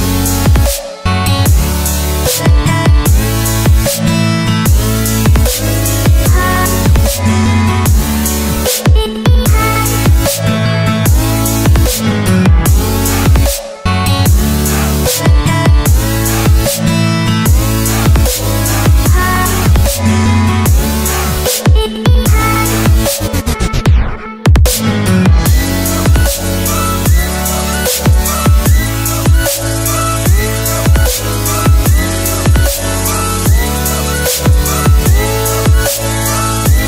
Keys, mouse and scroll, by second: 0.9 Return, 5.7 shift+Num_Lock, 5.7 click, 7.8 z, 9.0 click, 11.3 Return, 14.1 click, 16.3 Return, 19.6 click, 20.7 Return, 24.3 click, 25.5 Return, 31.2 click, 32.4 Return, 35.3 click.